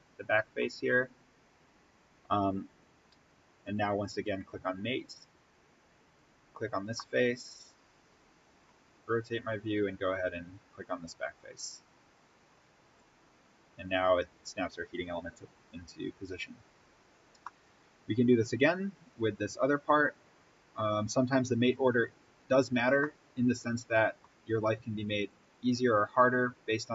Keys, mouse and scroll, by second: 3.5 click, 6.7-7.2 scroll up 1, 7.2-8.9 middle drag, 8.9-11.1 scroll down 1, 11.1 click, 13.5-13.8 scroll up 1, 16.3 scroll down 1, 17.4-19.4 middle drag, 19.4-20.0 scroll down 1, 21.6 click, 22.3-23.0 scroll up 1, 23.0-25.2 middle drag, 25.2 click.